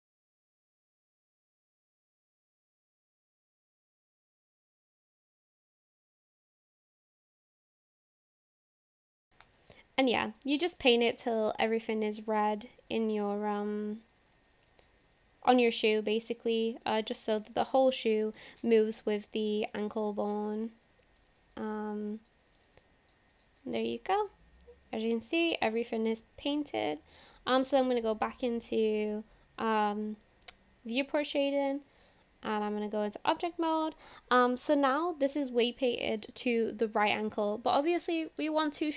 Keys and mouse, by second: 0.0 click, 0.1 click, 0.3 click, 0.4 click, 0.6 click, 0.8 click, 1.0 click, 1.1 click, 3.3 click, 3.4 click, 3.6 click, 3.7 click, 3.9 click, 4.1 click, 4.2 click, 4.4 click, 4.5 click, 4.7 click, 4.9 click, 5.0 click, 5.2 click, 5.4 click, 5.5 click, 5.7 click, 5.8 click, 6.0 click, 6.2 click, 6.3 click, 6.5 click, 6.6 click, 6.8 click, 7.0 click, 7.2 click, 7.3 click, 7.5 click, 7.6 click, 7.8 click, 8.0 click, 8.1 click, 8.3 click, 8.5 click, 10.2 click, 10.3 click, 10.4 click, 10.6 click, 10.8 click, 11.0 click, 11.1 click, 11.3 click, 11.5 click, 11.6 click, 11.8 click, 11.9 click, 12.1 click, 12.3 click, 12.4 click, 12.7 click, 12.8 click, 13.0 click, 13.2 click, 13.3 click, 13.5 click, 13.7 click, 13.8 click, 14.0 click, 14.2 click, 14.4 click, 14.5 click, 14.7 click, 14.9 click, 15.1 click, 15.2 click, 15.6 click, 15.7 click, 15.9 click, 16.1 click, 16.2 click, 16.4 click, 16.6 click, 16.7 click, 16.9 click, 17.1 click, 17.3 click, 17.5 click, 17.6 click, 17.8 click, 18.0 click, 18.1 click, 18.3 click, 18.4 click, 18.7 middle click, 19.6 click, 19.7 click, 19.9 click, 20.1 click, 20.2 click, 20.4 click, 20.6 click, 20.8 click, 20.9 click, 21.1 click, 21.3 click, 21.4 click, 21.7 click, 21.8 click, 22.0 click, 22.2 click, 22.4 click, 22.7 middle click, 23.4 click, 23.5 click, 23.7 click, 23.8 click, 24.2 click, 24.2-26.9 middle drag, 28.6 click, 32.1-32.7 drag, 34.0-34.4 shift+middle drag, 35.8-36.2 shift+middle drag, 36.2 click.